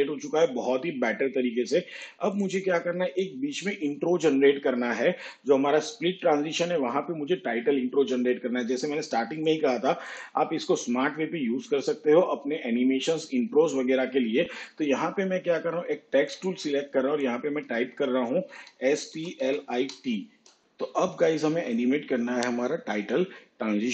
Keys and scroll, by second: 19.6 shift+s, 20.0 shift+p, 20.3 shift+l.